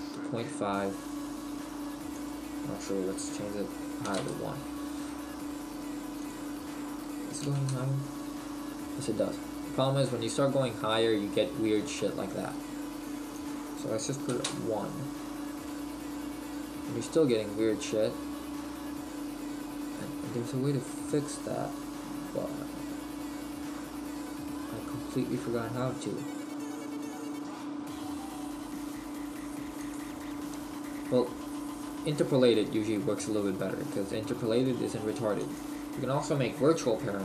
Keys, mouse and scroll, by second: 7.8 click, 9.4-9.9 scroll down 2, 10.3 middle click, 14.6 click, 15.9 middle click, 30.0 click, 31.4-31.7 scroll up 2, 32.2 middle click.